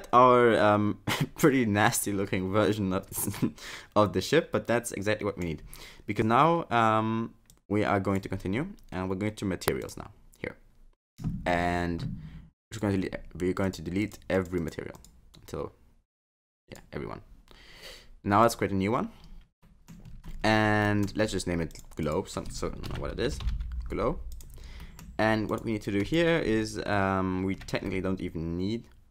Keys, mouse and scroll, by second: 7.5 click, 9.8 click, 12.7 click, 13.7 click, 14.0 click, 14.4 click, 14.6 click, 15.0 click, 16.7 click, 18.5 click, 19.6 middle click, 20.1-20.8 scroll up 11, 20.8 middle click, 21.7 click, 22.7 click, 24.8 middle click, 25.5 click, 25.9 click, 27.9 shift+middle click.